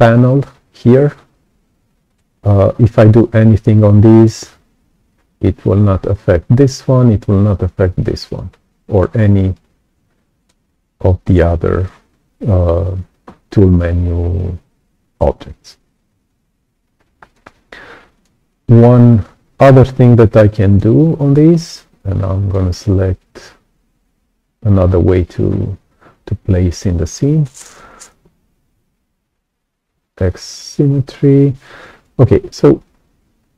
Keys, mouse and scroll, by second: 2.0 right click, 3.6 alt+click, 5.0 click, 10.3 right click, 11.2 click, 16.2 click, 17.2 right click, 18.1 click, 20.6 click, 21.9 click, 23.9 click, 28.3 x, 32.7-33.5 drag.